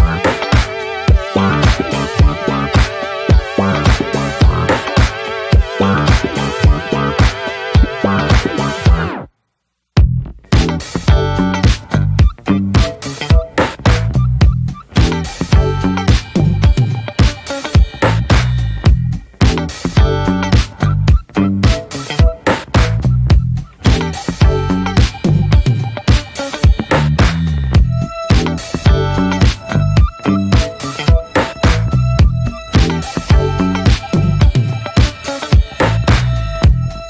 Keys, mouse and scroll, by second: 0.5 scroll down 1, 0.7 middle click, 1.1 scroll down 1, 1.3 middle click, 1.8-2.1 scroll up 2, 2.1 middle click, 2.5 scroll down 2, 3.4 shift+middle click, 3.7 scroll down 2, 4.2 shift+middle click, 4.4-5.2 scroll up 8, 4.8 shift+middle click, 5.6 shift+middle click, 5.7-6.0 scroll up 1, 6.4-8.6 shift+middle drag, 8.6-14.0 drag, 14.0 ctrl+z, 14.5 ctrl+z, 16.0-23.7 drag, 27.9-36.7 drag, 36.7 ctrl+z, 36.9 ctrl+z.